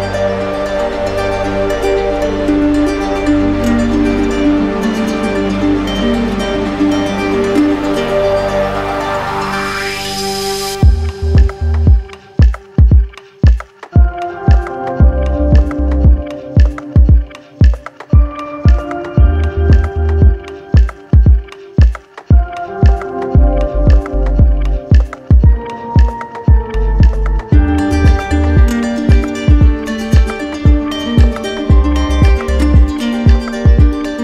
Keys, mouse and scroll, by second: 0.7 alt+right click, 1.1 right click, 2.4 shift+right click, 3.8 ctrl+click, 4.2 ctrl+click, 5.4 w, 7.6-8.8 alt+drag, 9.0-10.1 drag, 11.4-13.4 right drag, 13.4-14.5 ctrl+drag, 14.3 q, 15.1-16.2 right drag, 17.4 click, 18.2-20.6 right drag, 21.6 right click, 21.8 alt+right click, 22.7 click, 23.4 right click, 24.1 ctrl+d, 25.4 ctrl+d, 25.9 ctrl+d, 27.6 right click, 31.2 right click, 32.7 ctrl+z, 32.9 ctrl+z, 33.2 ctrl+z.